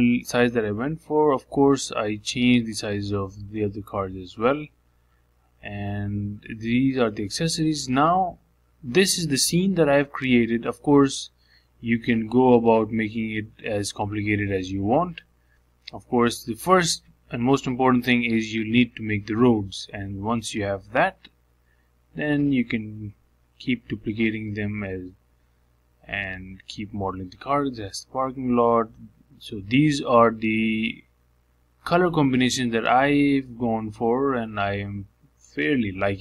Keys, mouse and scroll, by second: 0.1 middle click, 0.7-1.7 scroll down 5, 0.9 shift+middle click, 1.7-7.3 shift+middle drag, 9.1-11.2 drag, 11.2 shift+middle click, 11.9 scroll down 1, 12.1-14.6 middle drag, 14.6 z, 19.3-26.1 shift+middle drag, 26.1-26.5 scroll up 3, 26.5-28.5 shift+middle drag, 29.8 shift+middle click, 30.3-30.7 scroll up 4, 30.7-32.1 shift+middle drag, 32.1 click, 32.6 KP_Decimal, 32.9-34.0 scroll down 6, 34.0 shift+middle click, 34.8 click.